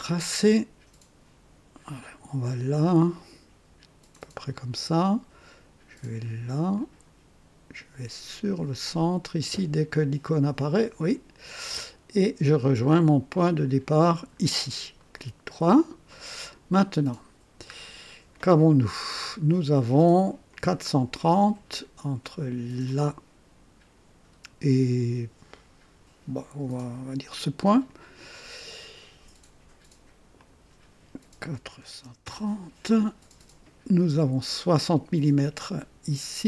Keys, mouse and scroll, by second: 0.0 Return, 2.0 click, 2.2 typing, 4.1 click, 6.7 click, 10.7 click, 11.7 right click, 11.7 click, 14.1 click, 15.0 right click, 16.1 right click, 16.7-17.4 right drag, 19.5 click, 20.5 click, 22.8 click, 27.8 click, 30.3 click, 31.5 KP_4, 31.8 KP_3, 32.2 KP_0, 32.3 KP_Enter, 35.4 right click.